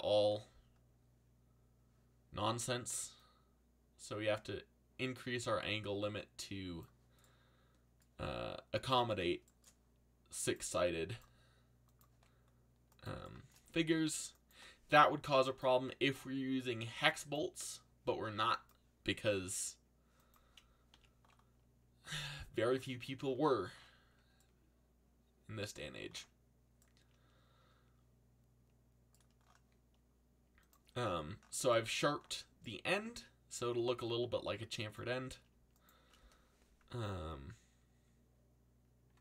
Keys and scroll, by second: 20.9 a.